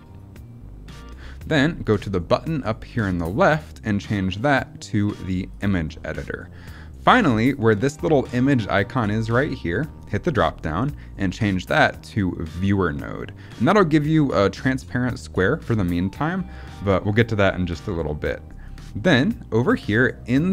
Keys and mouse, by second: 3.1-5.5 drag, 9.9-12.6 drag, 18.7 click.